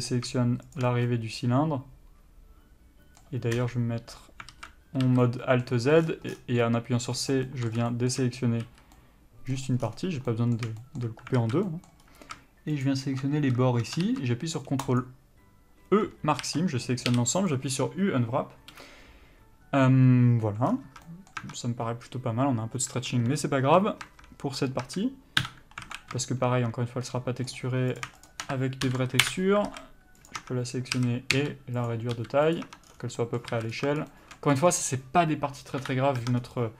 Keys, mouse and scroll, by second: 0.0 middle click, 1.0 shift+click, 1.3 middle click, 3.8 KP_3, 4.7 alt+z, 5.6 c, 7.7 middle click, 8.6 scroll up 1, 9.1 c, 9.7 middle click, 10.0-10.5 scroll down 1, 10.5 middle click, 11.6 alt+z, 11.9 middle click, 12.2-13.0 scroll up 1, 13.0 alt+shift+click, 15.2 ctrl+e, 16.6 a, 17.7 u, 20.9 scroll down 1, 21.1 Tab, 21.2 middle click, 21.6 Tab, 25.6 KP_Divide, 26.1 alt+a, 26.4 shift+middle click, 28.2 click, 29.5 ctrl+l, 29.9 alt+a, 30.5 click, 30.6 Tab, 31.2 a, 31.6 s, 32.1 click, 32.4 s, 32.8 click, 32.9 Tab, 33.1 scroll down 1, 33.4 middle click, 33.7 alt+a, 33.9-34.3 scroll up 1, 34.3 shift+middle click, 34.7 scroll up 1, 35.1 click, 36.0 KP_Divide, 36.4 Tab, 36.6 scroll down 1.